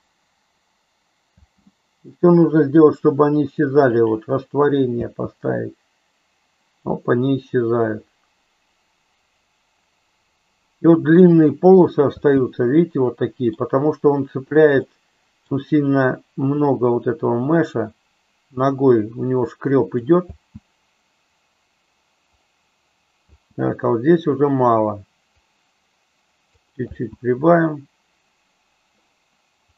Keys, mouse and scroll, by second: 1.5 space, 4.9 space, 12.3 space, 12.9 middle click, 14.9-15.5 middle drag, 16.6-20.1 drag, 20.2 space, 23.4 space, 25.4-26.6 drag, 26.9 space.